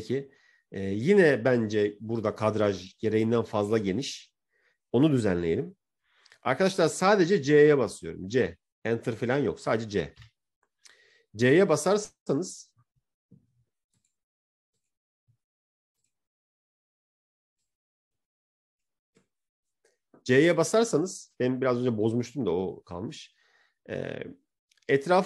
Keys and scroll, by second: 10.0 c.